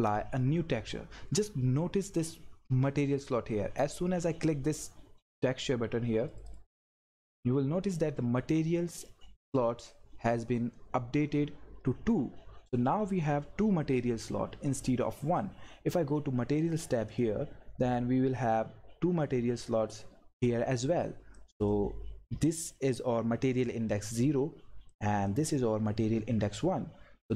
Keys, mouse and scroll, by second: 6.3 click, 13.1-16.6 drag, 21.3-24.2 drag, 24.9-27.3 drag.